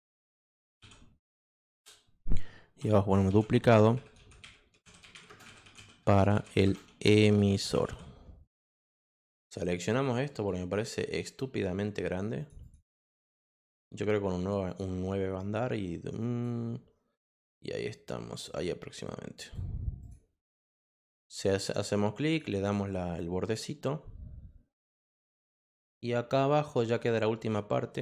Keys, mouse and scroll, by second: 0.0-1.3 typing, 1.7 shift+Return, 3.2-8.3 typing, 10.2 click, 12.4 click, 12.6 click, 12.8 click, 14.6 click, 16.2 click, 17.4-19.5 drag, 20.0 click, 21.0 click, 22.2 click, 23.4 click, 24.7 click, 25.5 click.